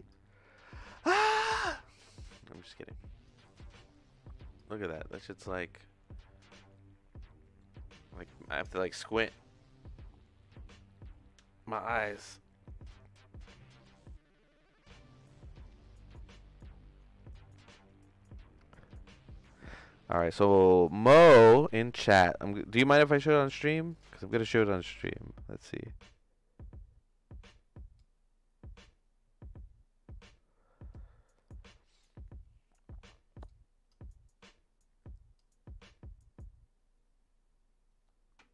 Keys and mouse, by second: 2.2 click, 2.7 click, 3.4-4.6 drag, 5.6-7.6 shift+middle drag.